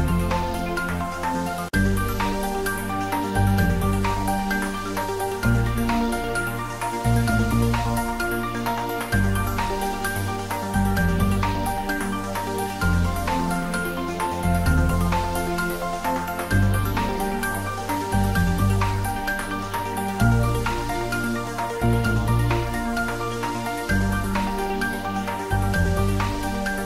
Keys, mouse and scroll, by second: 0.4-5.9 drag, 6.1 ctrl+s, 7.9-12.9 drag, 13.0 ctrl+s, 17.2 ctrl+s, 18.0 click, 20.0-21.8 scroll down 1, 21.9 click, 25.9 click, 26.1 ctrl+z.